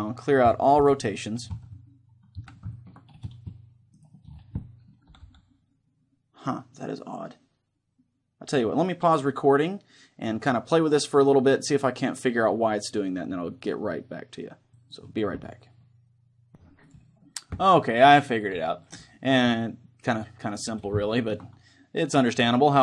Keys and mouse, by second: 0.8 alt+r, 1.7-6.5 middle drag, 1.7 a, 3.3 z, 4.0-5.8 right drag, 4.6 click, 5.2 r, 14.9-16.6 drag, 18.4-20.5 middle drag, 20.8-22.8 middle drag.